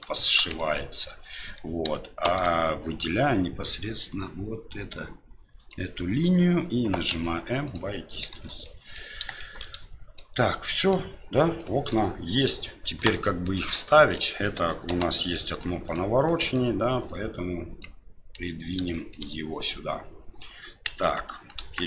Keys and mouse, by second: 0.1 shift+middle click, 0.6 Tab, 1.4 Tab, 2.3 shift+z, 4.1-5.7 drag, 7.1 m, 8.3 Tab, 8.6 middle click, 9.4 shift+z, 9.7-10.2 middle drag, 10.7 middle drag, 11.6-11.9 middle drag, 12.4-13.6 middle drag, 14.1 right click, 14.9 Delete, 15.8 right click, 16.2 middle click, 16.9-17.9 drag, 18.4 middle click, 19.0 shift+middle click, 19.6-20.5 middle drag, 20.9 KP_1, 21.5 KP_3.